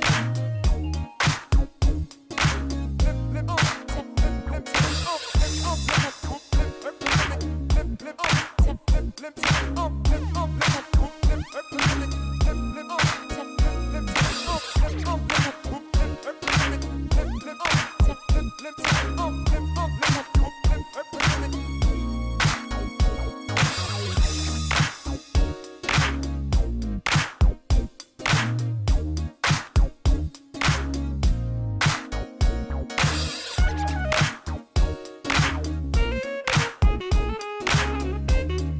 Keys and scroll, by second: 2.1 shift+z, 12.5 ctrl+i, 15.1 p, 17.2 Tab, 19.7 r, 19.9 o, 20.4 f, 20.7 Return, 22.7 Tab, 28.3 p, 29.7 Tab, 31.8 w, 31.9 a, 32.1 l, 32.9 Return, 35.9 f, 36.1 l, 36.3 o, 36.6 r, 37.0 Return.